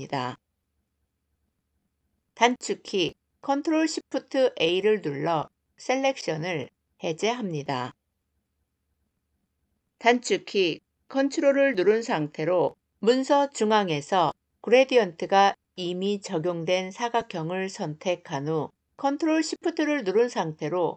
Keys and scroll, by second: 2.2 ctrl+shift+a.